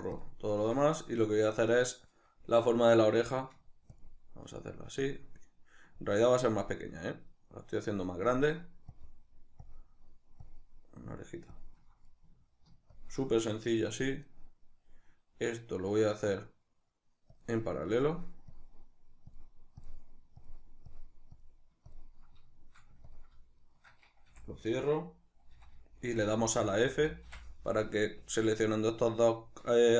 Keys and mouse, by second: 0.5 right click, 3.7 ctrl+click, 4.8 ctrl+click, 8.0 ctrl+click, 8.7 ctrl+click, 9.4 ctrl+click, 10.2 ctrl+click, 11.2 ctrl+click, 12.6 ctrl+click, 14.0 right click, 17.0 ctrl+click, 17.7 ctrl+click, 19.0 ctrl+click, 19.5 ctrl+click, 20.1 ctrl+click, 20.7 ctrl+click, 21.1 ctrl+click, 21.7 ctrl+click, 22.8 ctrl+click, 23.3 shift+right click, 24.1 f.